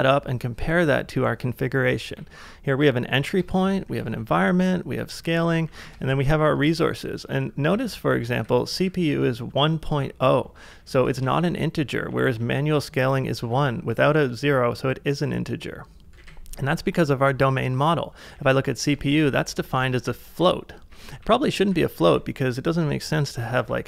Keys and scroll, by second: 2.1 shift+[, 3.3-13.7 typing, 4.3 ctrl+c, 7.1 ctrl+c, 16.1 typing, 18.3-22.5 typing, 19.7 ctrl+c, 23.5 d.